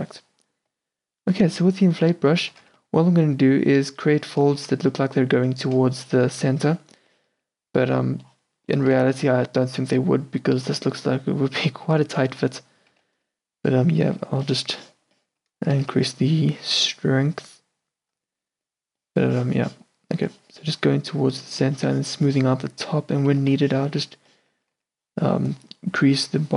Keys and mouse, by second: 0.0 ctrl+z, 2.0 f, 2.8 f, 5.9-7.1 middle drag, 5.9-7.7 d, 8.0-8.9 d, 9.4 n, 13.0 n, 15.8 shift+f, 23.4 shift+c, 24.8 s.